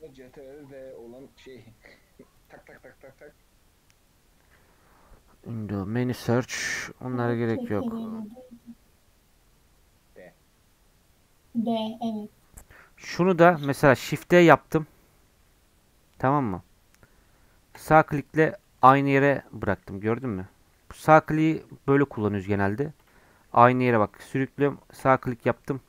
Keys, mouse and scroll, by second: 0.2-13.0 drag, 13.0-13.5 scroll up 2, 13.5 click, 14.1 shift+d, 18.4 scroll up 1, 18.6 middle click, 19.4 scroll up 1, 22.2 g, 23.6 g.